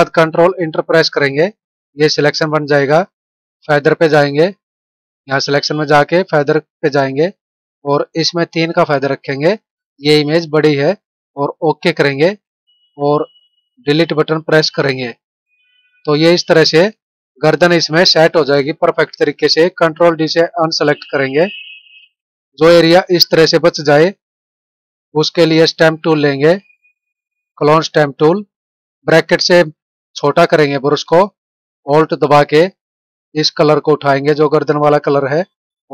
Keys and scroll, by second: 0.9 ctrl+Return, 14.6 Delete, 20.8 ctrl+d, 22.4 ctrl+=.